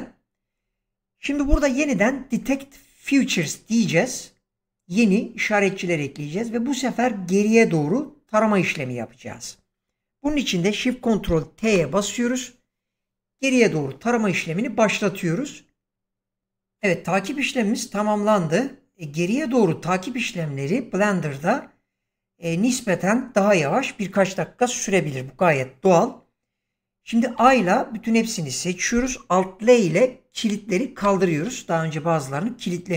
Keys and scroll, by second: 11.7 ctrl+shift+t, 27.3 a, 30.9 alt+l.